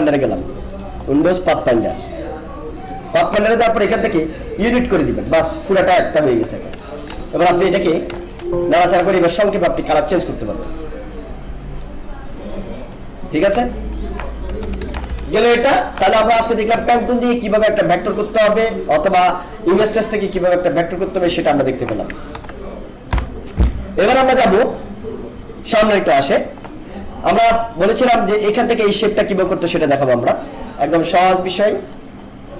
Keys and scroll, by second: 0.7 ctrl+F10, 7.2 alt+space, 8.2 alt+space, 14.6 ctrl+-, 22.3 ctrl+a, 23.1 Delete.